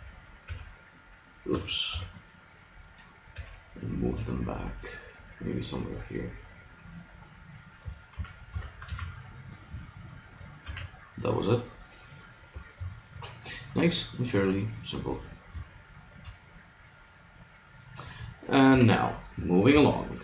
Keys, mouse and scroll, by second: 0.0-1.9 typing, 3.4 g, 7.9 click, 8.2 a, 8.5 Tab, 8.9 z, 10.6 a, 15.6 middle click, 18.8 KP_3.